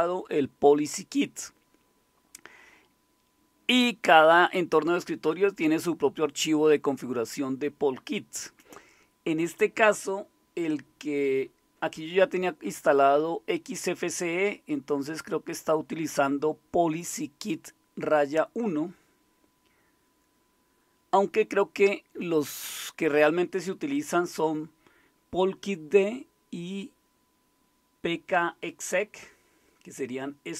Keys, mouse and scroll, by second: 1.0-3.2 scroll up 1, 3.2-4.1 scroll up 1, 4.1-5.2 scroll up 1, 5.2-8.1 scroll up 1, 8.1-15.7 scroll up 1, 15.7-17.6 drag, 26.8-29.0 drag.